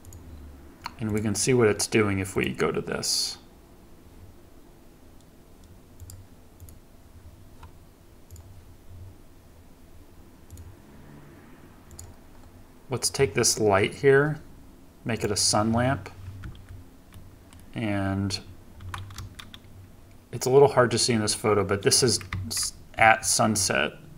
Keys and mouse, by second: 0.0-2.5 drag, 6.7 click, 8.3 click, 10.5 click, 11.9 click, 15.1 click, 16.4 KP_1, 17.1-17.6 middle drag, 19.2 KP_0, 22.3 KP_1, 23.0 KP_3.